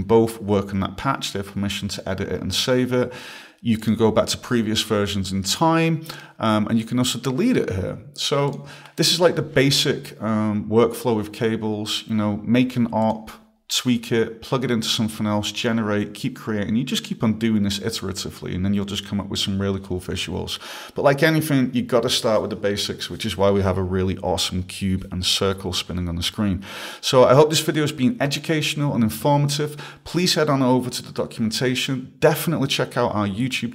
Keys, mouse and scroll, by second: 8.5 click, 9.0 click, 13.0 click.